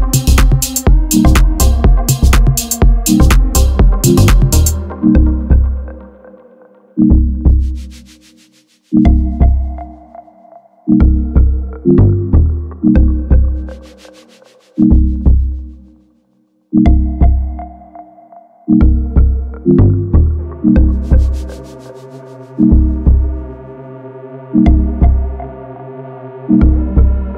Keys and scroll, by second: 0.5 2, 1.1 z, 3.0 ctrl+shift+r, 6.5 shift+r, 8.1 shift+r, 9.4 a, 10.3 Tab, 10.6 alt+c, 11.4 Tab, 12.4 3, 13.5 x, 15.2 2, 17.0 e, 19.8 ctrl+r, 21.7 a, 22.8 ctrl+f, 25.6 KP_7, 26.1 1, 27.1 ctrl+KP_Subtract.